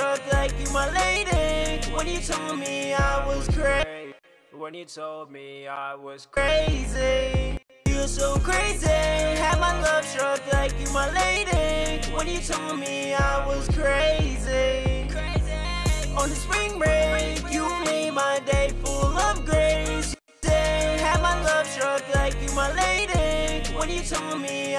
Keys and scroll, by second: 3.2 shift+s, 5.7 shift+s, 11.4 ctrl+Up, 11.6 ctrl+Up, 15.8 ctrl+shift+-.